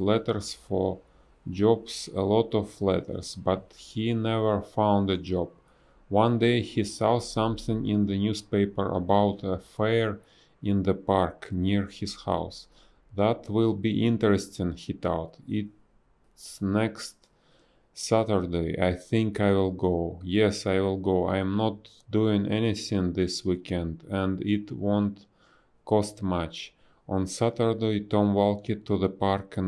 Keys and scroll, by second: 0.5 space, 1.0 b, 2.9 ctrl+z, 4.0 space, 5.8 space, 9.7 a, 9.9 space, 12.4 space, 13.5 space, 14.5 b, 14.8 space, 16.3 space, 18.8 space, 21.7 a, 22.6 BackSpace, 25.9 space, 27.4 space, 29.2-29.6 typing.